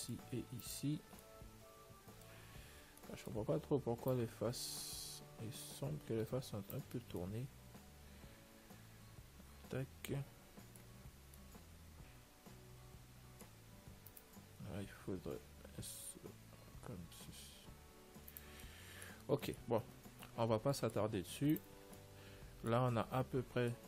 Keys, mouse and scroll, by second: 0.9-2.7 right drag, 4.4 click, 7.9-9.5 middle drag, 11.7-13.6 middle drag, 14.4-16.3 right drag, 15.7 r, 18.9-21.4 middle drag, 20.1 a, 20.3 Tab, 21.7 ctrl+s, 23.3 middle click, 23.5 middle click.